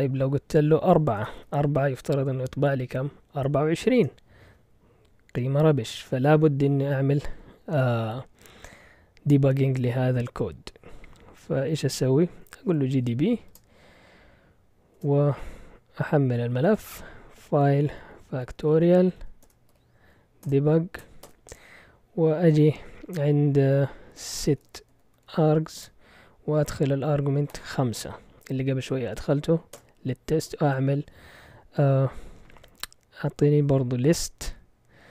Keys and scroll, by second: 1.1 BackSpace, 1.4 4, 3.9 Return, 12.5-13.5 typing, 14.9 Return, 16.0-21.5 typing, 23.9-26.0 typing, 27.5 typing, 29.7 typing, 32.5 ctrl+l, 34.5-35.1 typing.